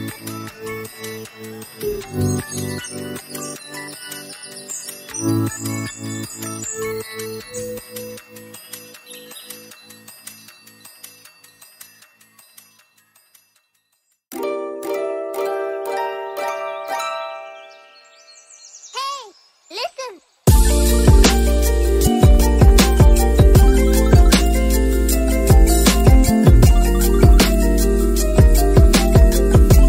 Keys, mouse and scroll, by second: 0.2 click, 0.3 middle click, 0.5 click, 0.8 click, 1.0 click, 2.3 click, 2.6 Tab, 2.7 click, 2.8 scroll up 5, 2.9 scroll down 3, 3.2 middle click, 3.3 Tab, 3.6 Tab, 3.6 middle click, 3.9 shift+click, 4.0 shift+click, 5.0 middle click, 5.2 shift+click, 5.7 middle click, 6.0 click, 6.0 middle click, 6.1 shift+click, 6.4 middle click, 6.6 g, 7.1 middle click, 7.4 click, 7.5 middle click, 8.0 right click, 8.5 click, 8.8 click, 9.1 click, 9.9 click, 10.7 shift+click, 11.4 click, 11.7 middle click, 12.0 ctrl+middle click, 12.8 middle click, 13.0 click, 13.2 click, 13.3 middle click, 13.5 click, 13.9 right click, 14.7 middle click, 15.1 click, 15.2 middle click, 15.7 click, 15.8 middle click, 16.0 click, 16.7 middle click, 17.2 middle click, 18.5 s, 18.8 middle click, 18.9 g, 20.6 middle click, 20.7 g, 21.0 middle click, 21.2 Tab, 21.3 middle click, 21.8 middle click, 22.4 middle click, 22.5 scroll up 2, 22.7 click, 22.9 click, 23.0 alt+click, 24.5 scroll up 1, 24.6 click, 25.1 right click, 25.5 middle click, 25.8 alt+click, 26.0 middle click, 26.2 middle click, 26.3 alt+shift+click, 26.4 middle click, 26.7 alt+shift+click, 27.3 right click, 27.5 middle click, 27.8 g, 27.9 middle click, 28.0 g, 29.8 click.